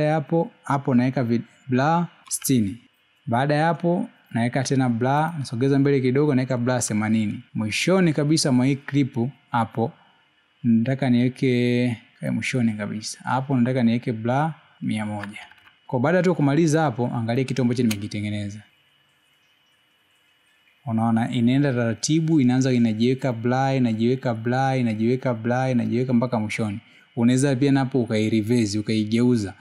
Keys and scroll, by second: 3.7 6, 8.9 8, 16.7 1, 18.7 space.